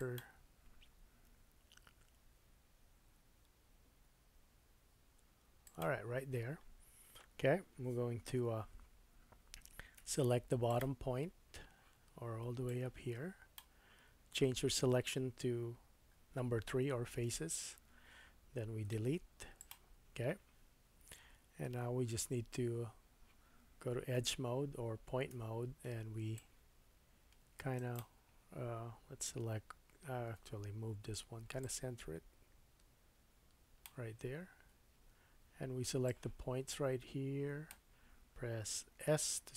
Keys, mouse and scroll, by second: 1.3 s, 8.2 Tab, 10.0 1, 10.7 click, 12.6-20.7 drag, 17.2 3, 18.9 x, 20.6-21.3 scroll up 2, 21.3-21.9 scroll up 2, 21.9-27.9 drag, 24.1 2, 25.3 1, 27.9-31.6 middle drag, 29.5 a, 30.4 Tab, 31.6-39.5 drag, 35.0 Tab, 39.2 s.